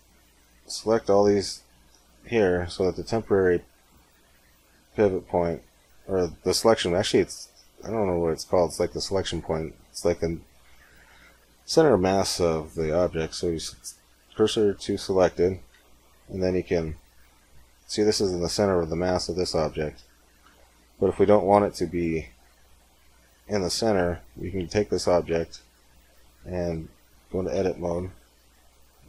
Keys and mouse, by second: 1.6-2.8 drag, 13.1 shift+s, 15.6 Tab, 16.7-18.2 drag, 23.3-25.1 middle drag, 25.1 KP_1, 25.6 KP_3, 26.6 z, 27.2 a, 27.8 a, 28.4 a.